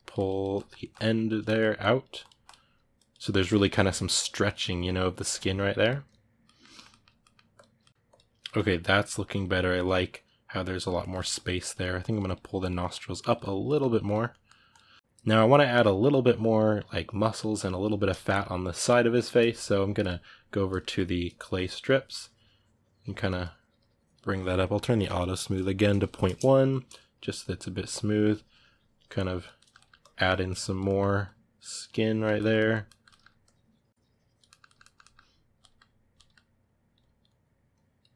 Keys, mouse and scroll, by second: 0.3-1.6 ctrl+middle drag, 1.6-3.4 drag, 3.4-5.6 ctrl+middle drag, 5.6 click, 6.2-7.4 ctrl+middle drag, 7.4 click, 7.6 ctrl+middle click, 8.0 click, 8.2-10.6 ctrl+middle drag, 10.6 click, 10.8-11.9 ctrl+middle drag, 11.9 click, 12.6 middle click, 12.9 click, 13.4 ctrl+middle click, 13.9 click, 14.1 middle click, 14.6 click, 14.8-19.8 ctrl+middle drag, 19.8 click, 20.6-21.6 ctrl+middle drag, 21.6-29.3 drag, 29.3 ctrl+middle click, 29.8 click, 30.6 middle click, 31.0-32.2 drag, 32.2-33.2 middle drag, 33.2-34.3 drag, 34.3-36.4 ctrl+middle drag, 36.4-37.9 drag, 37.9-38.1 ctrl+middle drag.